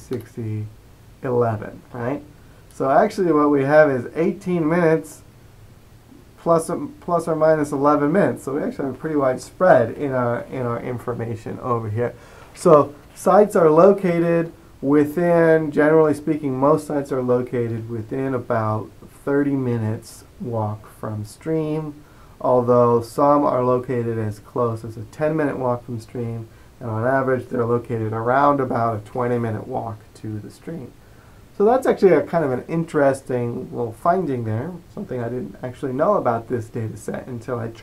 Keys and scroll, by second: 0.0-0.4 typing.